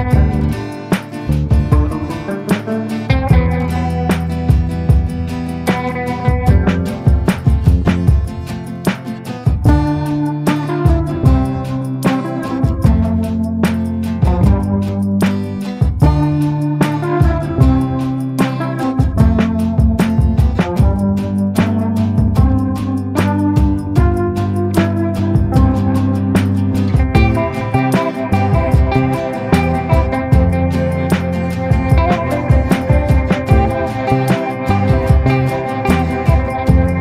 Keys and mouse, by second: 2.1-3.3 drag, 2.1 b, 4.2 click, 5.8 middle click, 6.2 middle click, 6.9 middle click, 7.1 click, 7.3 middle click, 7.6 shift+middle click, 11.6 ctrl+i, 12.3 b, 13.9-19.7 typing, 14.4 ctrl+i, 20.8 b, 22.7 b, 23.8 b, 25.1 b, 29.6 click, 30.2 ctrl+z, 31.2 click, 32.3 ctrl+z, 32.3 click, 32.7 click, 33.1-34.6 drag, 34.8 a, 36.8-37.0 middle drag.